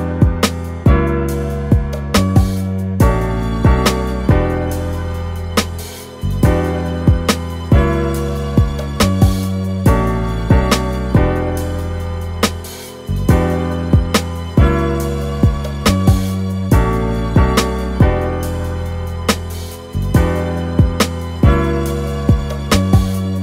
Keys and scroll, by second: 4.5 super+z, 5.0 alt+super+z, 5.9 alt+super+z, 15.8 super+t, 21.0 Return.